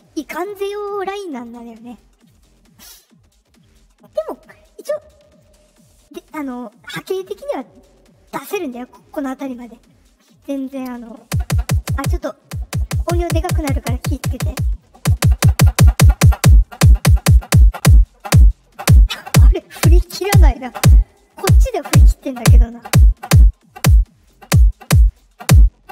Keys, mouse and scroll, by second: 14.7-15.9 drag, 24.1 click, 25.0 click.